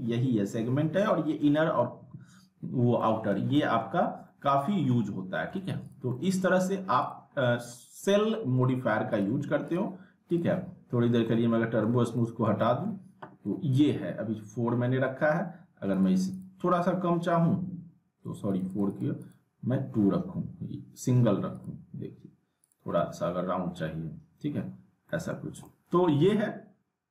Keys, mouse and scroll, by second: 3.0 middle click, 3.3 z, 3.5 middle click, 4.0 scroll up 2, 4.2-4.9 alt+middle drag, 5.9 click, 6.1-6.8 alt+middle click, 7.0 click, 7.3 scroll up 1, 7.7-8.3 alt+middle drag, 9.1 click, 10.9 scroll up 2, 11.2-11.8 alt+middle click, 11.9 scroll down 2, 15.9 click, 18.7 click, 21.6 click, 25.1 middle click, 25.4 scroll down 1, 25.6-26.3 alt+middle click, 26.2 scroll down 1, 27.0 scroll up 1.